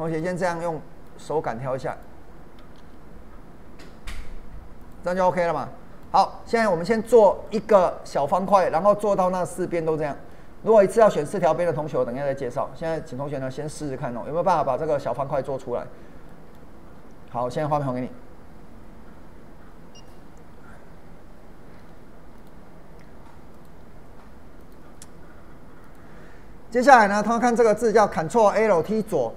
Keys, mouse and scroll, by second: 0.1 click, 0.4-1.9 middle drag, 1.9 click, 2.8 ctrl+b, 4.8 click, 5.1 middle click, 6.2-6.6 scroll down 2, 6.6 middle click, 8.4-8.8 scroll up 1, 8.8 middle click, 9.7-10.0 scroll up 1, 10.3-14.0 middle drag, 14.0-14.5 scroll down 2, 14.5 middle click, 15.8-16.3 scroll down 2, 16.3 middle click, 22.4 click, 22.5 click.